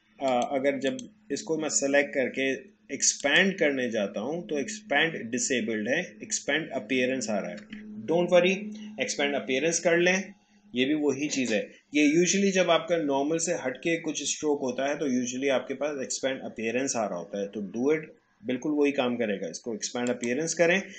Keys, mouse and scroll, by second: 0.2 click, 3.2 click, 20.1 click.